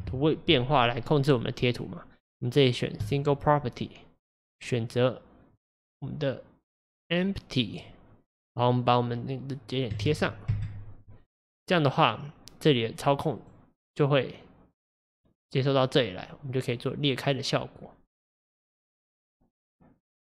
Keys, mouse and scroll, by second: 7.8-10.5 drag, 13.5 click, 15.1-18.1 drag.